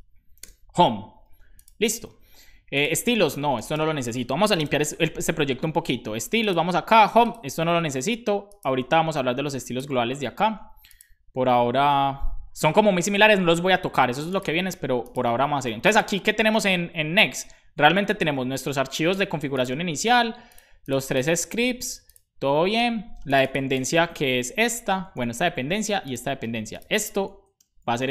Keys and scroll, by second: 0.4 BackSpace, 1.2 super+s, 3.8 super+s, 4.6 super+b, 24.4 Down, 24.6 super+Right, 27.4 Left, 27.6 BackSpace.